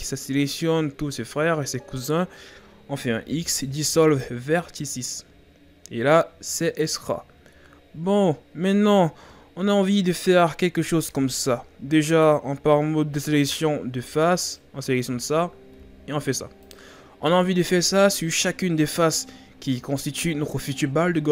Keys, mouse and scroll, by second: 0.4-3.2 scroll up 5, 3.2 x, 5.0-8.1 scroll down 3, 9.5-10.1 scroll up 4, 11.0 ctrl+Tab, 14.5 right click, 17.5-18.2 scroll down 5, 18.2-20.8 scroll up 2.